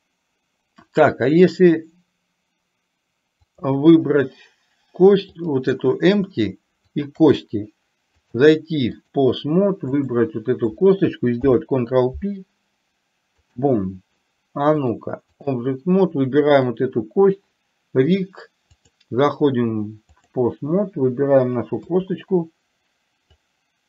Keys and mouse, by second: 3.6 click, 5.5 click, 7.0 shift+click, 8.4-9.4 drag, 11.6 ctrl+p, 15.0-15.6 drag, 16.6 click, 18.9-20.4 drag, 23.5-23.8 drag.